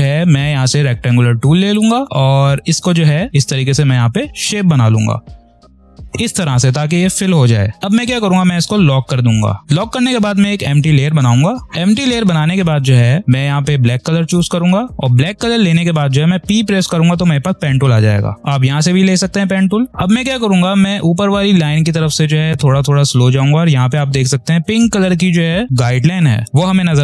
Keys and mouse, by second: 1.6-8.2 drag, 11.0 click, 14.2 click, 17.3 p.